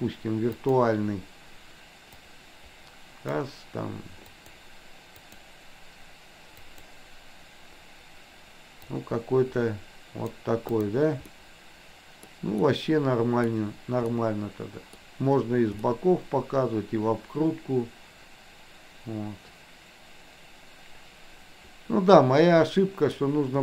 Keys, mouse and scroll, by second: 0.6 click, 10.8 drag, 11.3-12.2 middle drag, 12.6 middle click, 14.2-15.1 middle drag, 15.8-23.2 middle drag.